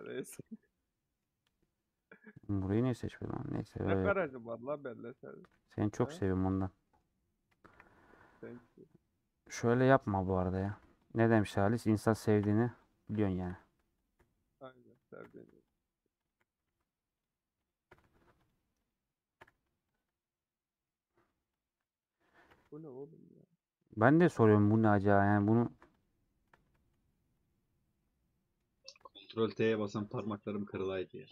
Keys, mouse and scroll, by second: 0.2 3, 0.3 click, 0.6-2.7 middle drag, 3.2-6.0 middle drag, 6.0 1, 6.8 middle click, 7.7 KP_Decimal, 8.2 scroll down 1, 8.8-9.3 scroll down 9, 9.3-9.8 scroll up 1, 10.0 scroll down 3, 10.5 g, 11.2 middle click, 12.1-13.2 drag, 13.2 shift+middle click, 14.1 click, 20.3-21.7 middle drag, 21.7 click, 22.2 click, 28.0-29.3 middle drag, 29.3 click, 29.8 middle click, 30.7 3, 31.0-31.3 middle drag.